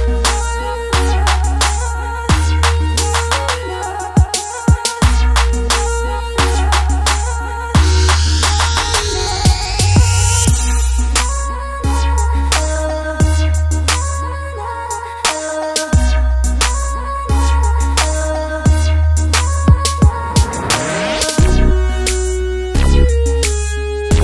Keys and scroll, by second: 1.3 space, 5.7 super+z, 14.5 space, 16.2 super+z, 16.7 space.